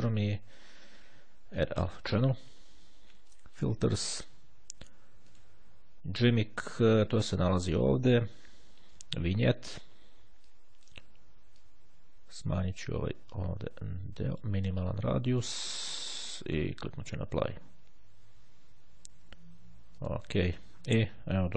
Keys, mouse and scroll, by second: 1.7 click, 3.5 click, 5.3 click, 7.6 click, 8.4-8.9 scroll down 1, 9.3 click, 10.6-11.5 drag, 11.7-15.0 drag, 17.2 click, 20.1 click.